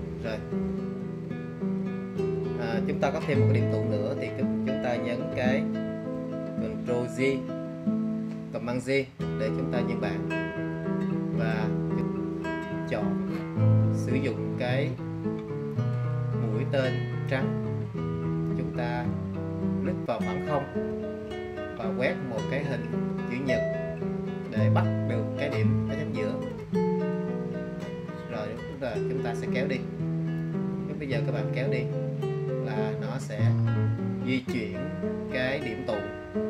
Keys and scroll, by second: 6.2 super+j.